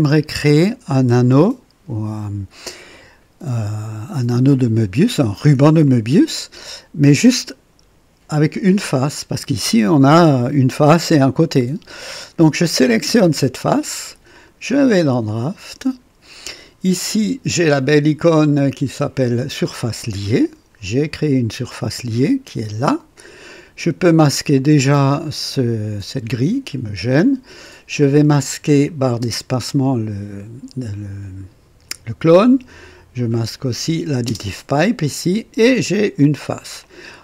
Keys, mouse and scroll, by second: 2.9-5.3 drag, 5.8 click, 12.6 click, 14.3 click, 15.3 click, 20.0 click, 26.1 click, 28.7 click, 29.2 space, 33.1 click, 34.3 space, 34.4 space, 36.8-37.2 drag.